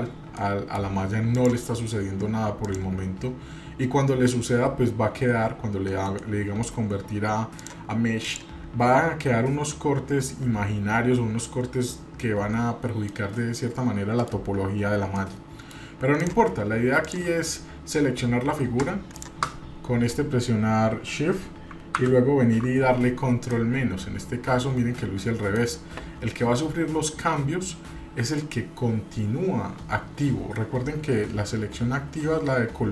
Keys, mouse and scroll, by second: 0.4 middle click, 1.3 click, 2.6 click, 3.4 scroll up 1, 6.0-7.1 right drag, 7.5 click, 8.2 click, 12.5-13.0 scroll down 2, 13.0-14.3 middle drag, 15.1-15.9 middle drag, 16.2 click, 17.0 drag, 19.1 shift+click, 22.0 ctrl+KP_Subtract, 23.5-25.7 middle drag.